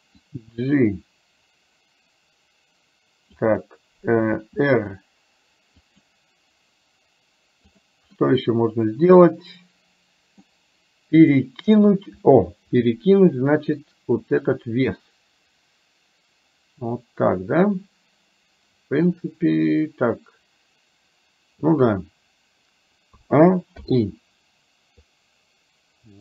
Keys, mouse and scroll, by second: 0.4-3.5 drag, 4.4 r, 8.2-10.6 middle drag, 11.7 KP_1, 14.5-21.7 drag, 23.2 a, 23.9 i, 25.1-26.2 drag.